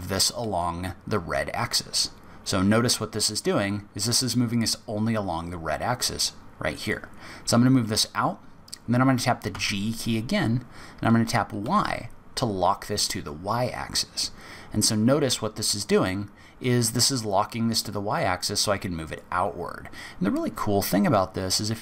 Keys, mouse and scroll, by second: 9.5 g.